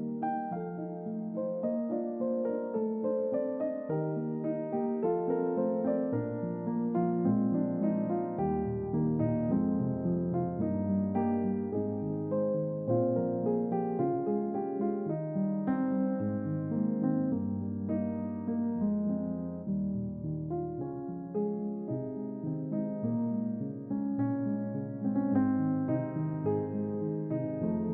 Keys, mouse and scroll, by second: 0.3 click, 1.0 click, 3.0 click, 3.9 click, 4.3 Tab, 4.8-6.3 middle drag, 6.3 click, 7.4-7.8 ctrl+middle drag, 8.3-8.8 shift+middle drag, 12.6 alt+z, 13.5-14.9 drag, 15.9-16.9 shift+drag, 17.3 shift+click, 20.8 click, 22.6 click, 25.1 ctrl+KP_Add, 26.9 click.